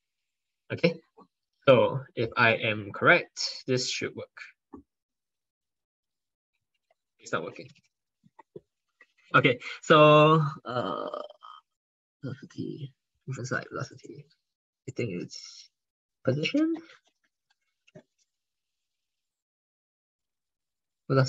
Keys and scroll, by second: 18.8 ctrl+Left, 19.3 ctrl+Right, 19.6 ctrl+Right, 20.1 ctrl+Left, 20.8 ctrl+BackSpace, 21.1 ctrl+BackSpace.